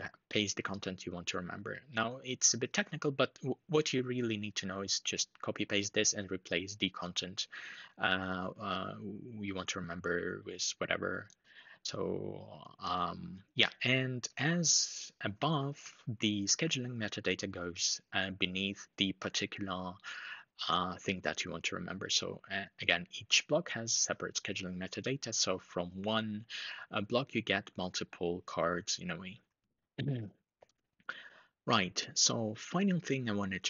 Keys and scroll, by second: 15.5 super+Down, 29.3 super+Up.